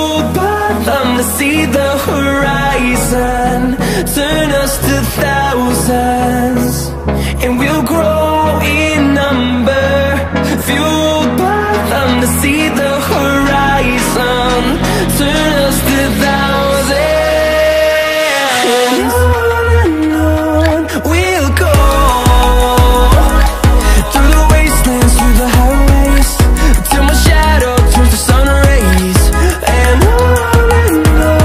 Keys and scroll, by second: 28.1 s, 29.2-31.4 typing.